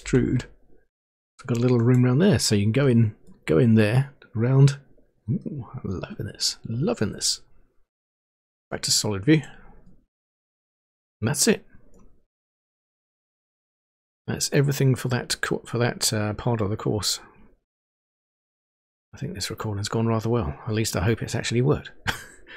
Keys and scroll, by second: 0.2 e.